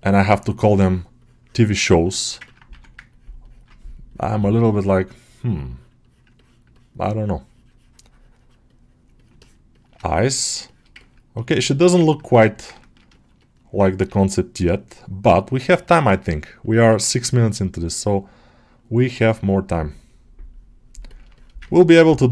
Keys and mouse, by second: 2.5 1, 3.0-5.6 ctrl+drag, 5.9-9.3 drag, 9.3 ctrl+middle click, 10.5 shift+middle click, 10.8 ctrl+middle click, 11.6 middle click, 12.3 alt+middle click, 12.7 ctrl+middle click, 13.9 g, 14.4-15.9 middle drag, 16.0 ctrl+middle click, 16.3 alt+middle click, 16.7 1, 17.8-19.7 ctrl+drag, 20.4 ctrl+click, 20.9 ctrl+middle click, 21.2 shift+middle click, 21.5 ctrl+middle click, 21.8 alt+middle click.